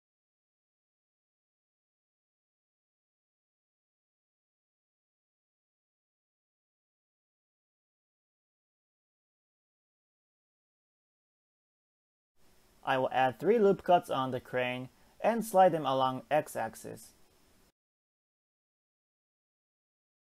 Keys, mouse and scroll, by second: 5.4 shift+middle click, 6.1 click, 11.7-12.1 scroll up 4, 12.1 shift+middle click, 12.3 ctrl+z, 12.7 ctrl+r, 14.5 click, 15.1 g, 19.4 click, 19.9 g.